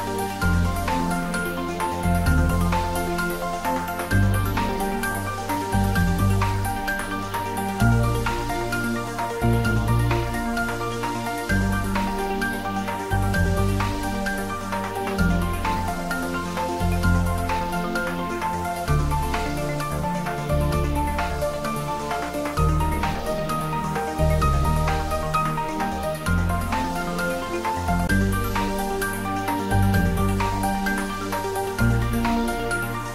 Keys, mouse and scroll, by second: 0.0 g, 0.5 z, 1.4 click, 2.5 g, 2.8 y, 3.5 x, 7.8 click, 8.4-9.7 middle drag, 10.3 click, 10.6-11.2 scroll down 1, 11.2-12.4 middle drag, 13.2 click, 14.0-15.0 typing, 15.8 click, 16.2-17.4 scroll up 1, 17.4 Tab, 18.3 ctrl+b, 20.7 click, 21.2 scroll up 1, 22.1 Tab, 22.5-23.0 scroll down 1, 26.7-27.0 scroll down 1, 27.0-30.1 middle drag, 30.8-31.5 middle click, 31.8 g, 32.2 z.